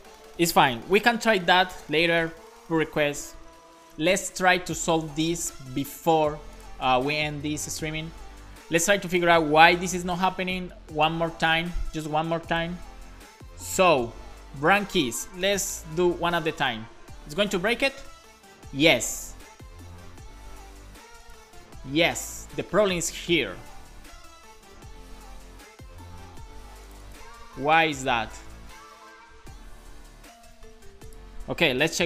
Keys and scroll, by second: 9.9 super+s, 15.5 BackSpace, 15.9 super+s.